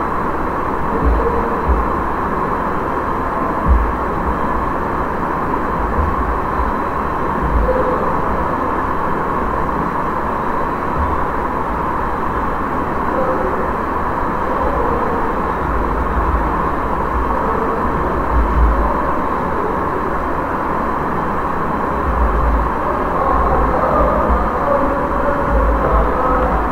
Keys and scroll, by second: 6.5 ctrl+a, 14.5 q, 14.8 a, 15.6 BackSpace, 18.7 space, 22.1-26.7 typing.